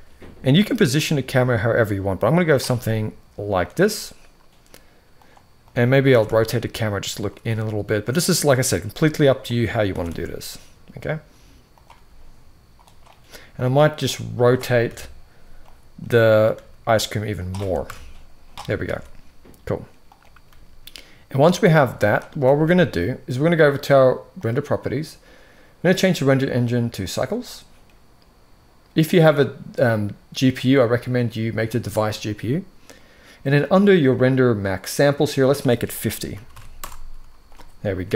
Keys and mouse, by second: 0.7 g, 2.3 g, 4.8-5.4 drag, 5.8 r, 7.1 r, 8.5 g, 9.6 r, 11.6 r, 13.3-13.7 drag, 14.5 KP_1, 15.5 click, 16.2 r, 17.5 KP_0, 18.6 alt+a, 19.8 click, 20.2 g, 22.2 ctrl+s, 25.8-26.8 drag, 30.3-31.5 drag, 35.0-36.5 drag, 37.7 ctrl+s, 37.9 ctrl+s.